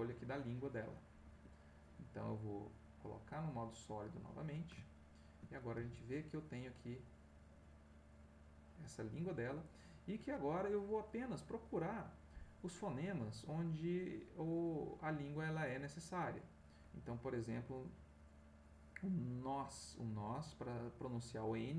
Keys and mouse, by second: 1.2 Escape, 4.1 click, 4.8 ctrl+middle click, 5.8 ctrl+g, 9.2 Escape, 13.4-21.7 drag.